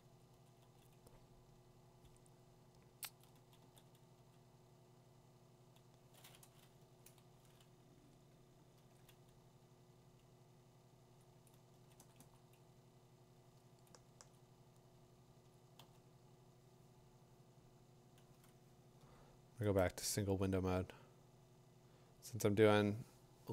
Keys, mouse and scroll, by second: 3.1 click, 3.1 8, 3.6 2, 9.1 ), 11.2 click, 11.7 click, 12.0 click, 12.2 click, 13.9 ctrl+alt+-, 14.3 3, 14.4 click, 14.6 3, 15.5 click, 22.8 click.